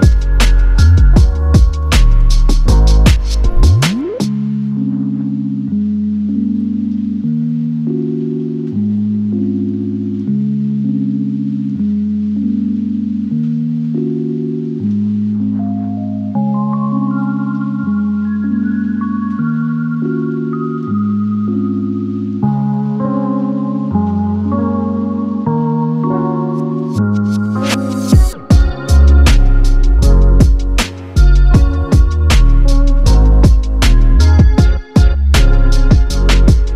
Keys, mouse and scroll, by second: 0.1 Delete, 0.3 middle click, 0.8 Delete, 0.8 middle click, 1.1 middle click, 1.3 scroll down 1, 1.4 typing, 5.1-5.7 typing, 5.8 Return, 6.8 typing, 7.0 Return, 7.6 Delete, 7.9 Delete, 8.3 ctrl+z, 8.9 Delete, 9.1 Delete, 9.3 Delete, 9.6 Delete, 10.1 Delete, 10.2 right click, 11.8-12.3 scroll up 5, 12.3 Delete, 12.4 Delete, 13.1 Delete, 13.2 scroll down 4, 13.4 scroll up 8, 13.5 middle click, 14.0 Delete, 14.4 Delete, 14.9 scroll down 10, 15.4 Delete, 15.5 middle click, 15.8 middle click, 16.4-16.9 scroll down 5, 17.4 double click, 18.0-18.3 scroll down 1, 18.3 double click, 18.4 right click, 18.8 double click, 18.9 right click, 20.1-20.6 typing, 21.5 double click, 21.9 right click, 22.5-25.1 typing, 23.4 shift+click, 24.7 scroll up 4, 25.8 middle click, 26.2 scroll up 3, 26.3 scroll down 2, 26.4-29.2 typing, 26.6 double click, 27.3 Return, 27.7 double click, 27.8 right click, 29.5 double click, 29.6 right click, 30.1 scroll up 8, 30.3 r, 31.3 double click, 31.4 right click, 31.8 s, 32.1 shift+click, 32.7 ctrl+click, 32.8-33.2 typing, 33.0 double click, 33.9-34.5 scroll down 5, 34.6-36.7 typing, 35.0 scroll down 1, 35.1 middle click, 36.1 Return.